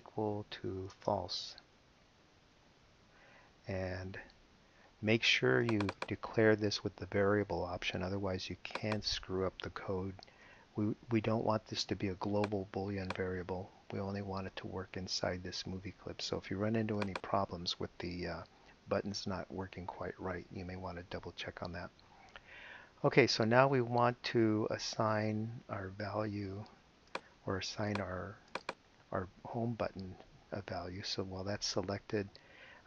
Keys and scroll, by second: 0.7 =, 0.8 space, 2.5 l, 2.8 s, 10.2 Return.